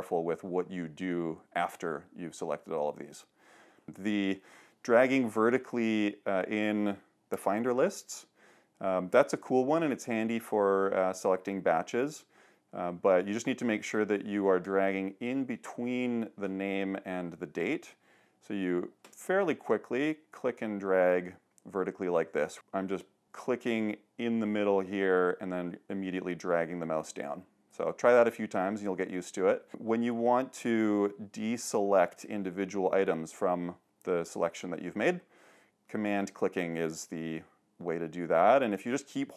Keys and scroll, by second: 5.1 super+h, 7.4 shift+super+o.